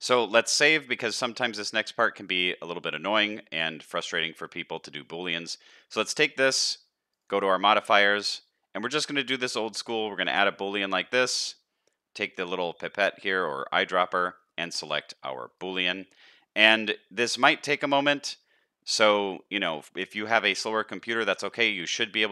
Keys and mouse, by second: 0.3 ctrl+s, 2.3-4.7 middle drag, 7.9-10.4 drag, 16.7-19.5 middle drag, 19.8 shift+middle click, 20.2 middle click, 20.8 shift+middle click, 21.2 middle click, 21.8 shift+middle click.